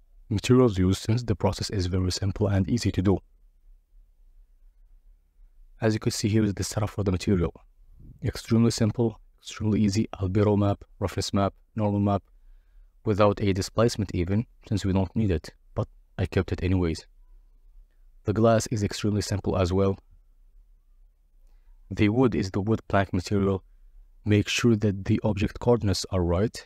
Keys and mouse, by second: 1.6 click, 3.8 click, 4.9 click, 6.9-8.0 drag, 10.6 click, 12.4 middle click, 13.7 click, 16.2 Tab, 16.4 Tab, 16.5 Tab, 16.6 Tab, 16.8 Tab, 16.9 Tab, 19.6 click, 20.3 middle click, 20.8 click, 21.7 Delete, 22.1 click, 23.5 click, 25.6 Tab.